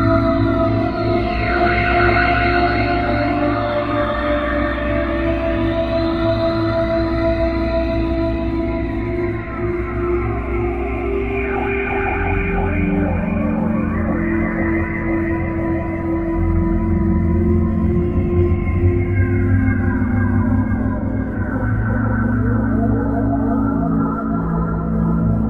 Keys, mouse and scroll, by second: 0.0-2.6 typing, 4.6 middle click, 9.3 KP_5, 11.1 KP_5, 11.9 KP_5, 12.7 KP_5, 14.4-15.3 scroll down 5, 15.5-16.0 scroll up 3, 18.0 Delete, 21.6 click, 25.2 click.